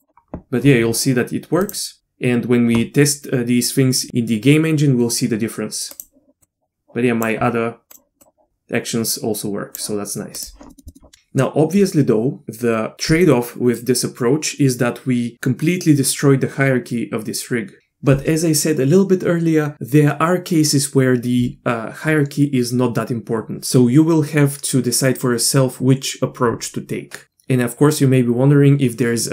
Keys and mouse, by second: 1.7 click, 5.9 click, 6.4 click, 7.9 click, 8.2 click, 10.3 click, 10.7 middle click, 10.9 middle click.